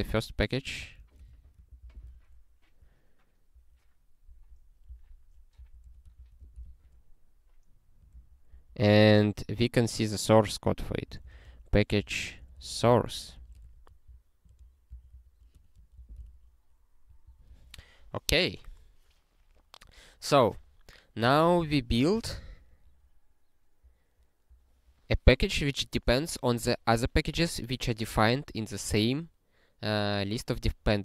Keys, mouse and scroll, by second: 0.1-1.4 typing, 1.7 ctrl+n, 1.8 ctrl+e, 3.5 ctrl+p, 4.3 ctrl+p, 4.8 ctrl+b, 5.5 d, 5.8 a, 6.2 ctrl+n, 6.4 ctrl+e, 8.1 ctrl+p, 8.5 ctrl+a, 9.1 (, 10.8-13.5 typing, 13.6 alt+shift+s, 14.1 ctrl+n, 14.5 ctrl+p, 14.9 Return, 15.1 ctrl+n, 15.5 Tab, 15.9 ctrl+e, 17.3 ctrl+n, 23.8 click, 24.5 click.